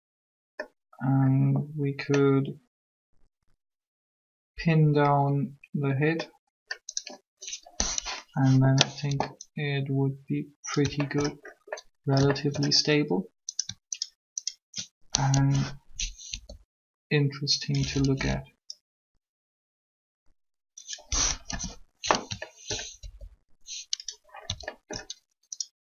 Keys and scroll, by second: 8.0 1, 15.0 shift+1, 16.3 r, 21.3 7, 23.0 alt+shift+r.